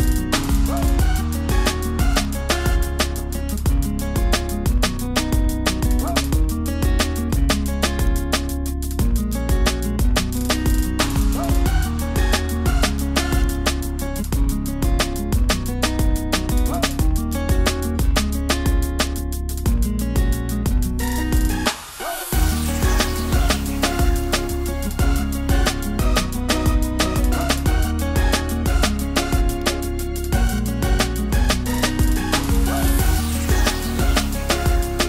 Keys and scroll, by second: 10.4 super+i.